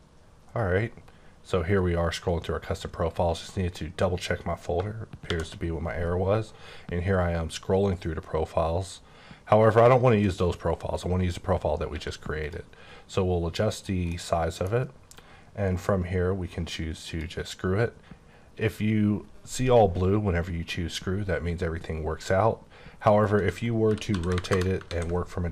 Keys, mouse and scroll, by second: 5.3 p, 6.1-7.7 scroll up 8, 7.7-8.6 scroll down 6, 10.9 right click, 11.8 q, 12.3 click, 13.8 click, 14.1 middle click, 15.0 q, 17.1 click, 23.1 right click, 23.9-24.4 typing, 24.5 KP_Enter, 24.9 ctrl+a.